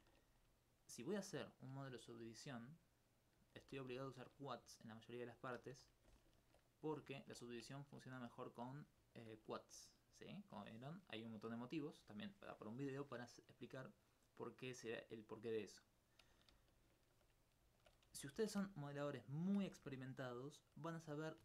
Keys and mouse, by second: 2.4 click, 3.6 g, 4.2 shift+click, 4.5 right click, 4.8 shift+right click, 5.4 shift+right click, 6.1 alt+click, 6.4 alt+click, 7.5 alt+click, 14.5-16.5 middle drag, 17.4 right click, 17.8 alt+click, 18.1 alt+click, 19.4 shift+click, 19.6 alt+s, 20.2 shift+right click.